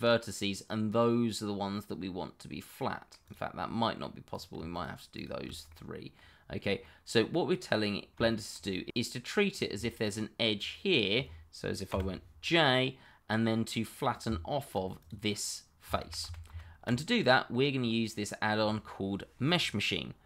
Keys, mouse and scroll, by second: 3.3 click, 3.6 middle click, 3.9 middle click, 4.3 click, 4.7 shift+click, 5.7 middle click, 8.5 shift+middle click, 8.6 shift+scroll up 1, 8.9 middle click, 9.5 click, 10.0 shift+click, 10.1 click, 10.5 shift+click, 11.9 j, 12.4 middle click, 14.2 Tab, 15.0 click, 16.0 ctrl+z, 17.0 middle click, 17.7-18.2 scroll down 1, 18.2 middle click.